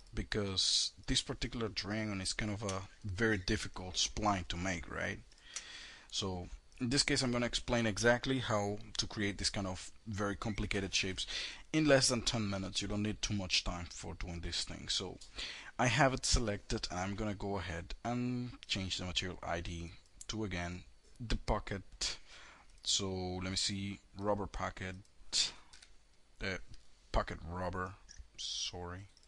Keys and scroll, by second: 25.2 KP_4, 26.0 Return.